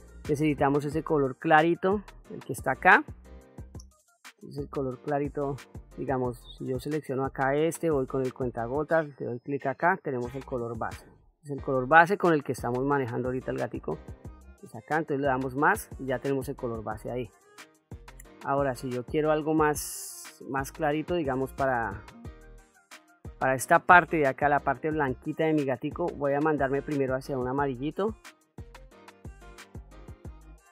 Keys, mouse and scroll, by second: 6.5 click, 11.3 click, 15.1 click, 18.9-20.2 drag, 21.0 click, 25.5 click.